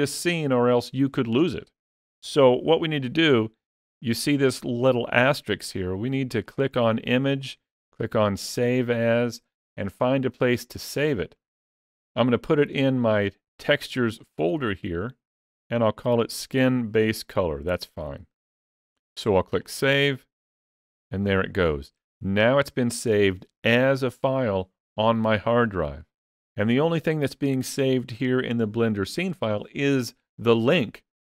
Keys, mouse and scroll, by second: 6.2 click.